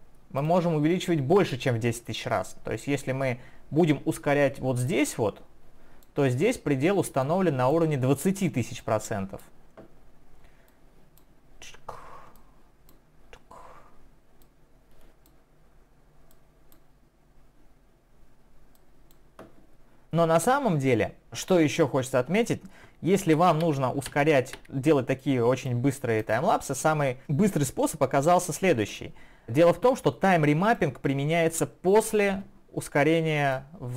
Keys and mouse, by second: 23.2 ctrl+z, 25.2 click, 26.2 click, 28.9 click, 30.6 click, 33.4 right click.